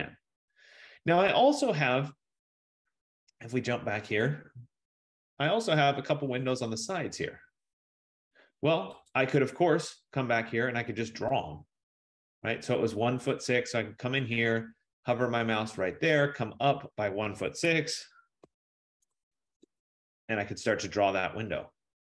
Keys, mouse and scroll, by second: 4.7 click, 9.8 click, 13.5 click, 14.5 middle click, 17.8-20.1 typing.